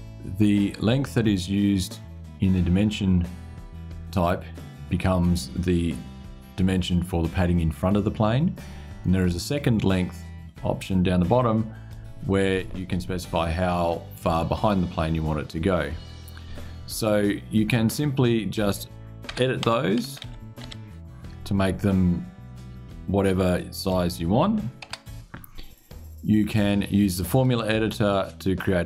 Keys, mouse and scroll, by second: 11.1 click, 17.6 click, 19.0 BackSpace, 19.3 o, 19.7 BackSpace, 19.9 0, 23.5 click, 24.5 BackSpace, 27.0 click.